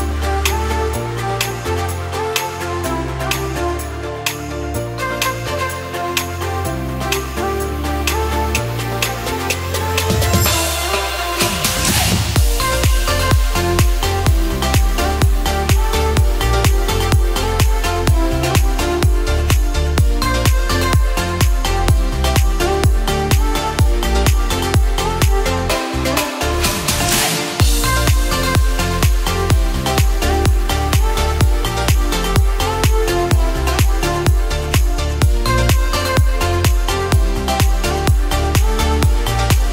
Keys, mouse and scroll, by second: 0.9 shift+d, 3.1 click, 4.0 click, 5.0 click, 6.2 click, 6.9 click, 9.3 KP_1, 10.4 click, 10.9-11.8 scroll up 7, 11.8 KP_Decimal, 12.5-13.1 scroll up 3, 13.1 scroll up 3, 13.4 click, 13.8 click, 15.0-15.5 scroll up 8, 16.5 click, 19.8 scroll down 5, 21.3 click, 25.8 click, 26.4 click, 28.3 click, 29.5 click, 30.7 click, 31.2 scroll up 1, 32.8 click, 35.4 n, 36.7 click, 37.5-37.9 scroll up 1, 37.9 click.